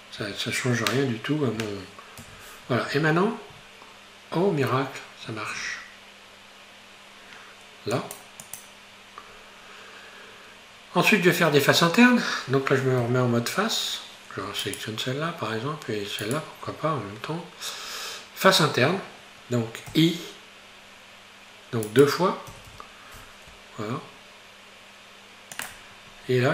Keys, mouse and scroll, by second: 0.2 Tab, 2.3 ctrl+r, 9.3-11.8 scroll up 1, 13.0 3, 14.7 shift+right click, 16.2 shift+right click, 17.3-19.9 scroll down 1, 19.9 i, 22.5 i, 26.1-26.5 scroll up 2.